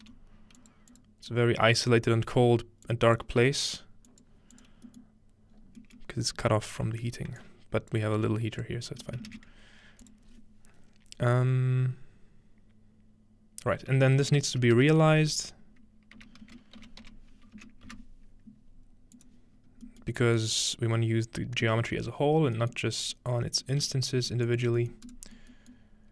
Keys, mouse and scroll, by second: 0.1 g, 0.6 click, 0.9 click, 1.3 click, 2.1 scroll down 1, 2.9-3.2 drag, 3.4 g, 4.1 click, 4.6 click, 5.5-5.8 middle drag, 5.6-6.1 scroll up 2, 6.0-7.4 middle drag, 6.1-7.3 scroll down 2, 7.4-8.0 drag, 8.2 g, 9.3 shift+a, 11.2-12.6 drag, 14.2-14.8 typing, 16.2-18.4 typing, 19.2 click, 19.6-21.8 scroll up 2, 20.1-21.8 middle drag, 20.4 click, 22.0-22.6 scroll down 2, 22.8-24.3 middle drag, 23.1 click, 23.9 g, 24.3-26.1 drag, 24.5 middle click, 24.8-26.1 middle drag, 25.4-26.1 scroll up 1.